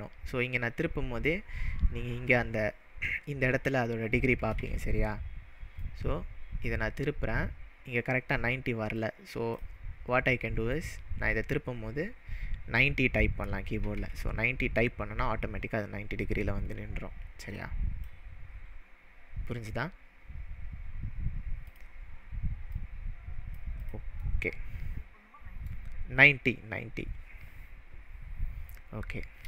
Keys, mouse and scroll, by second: 4.6 ctrl+z, 5.8-9.8 click, 8.9-10.7 right drag, 10.7-18.2 click, 13.6-14.5 typing, 21.7-22.9 drag, 23.8 click, 24.2-25.7 middle drag, 29.0-29.4 scroll up 2.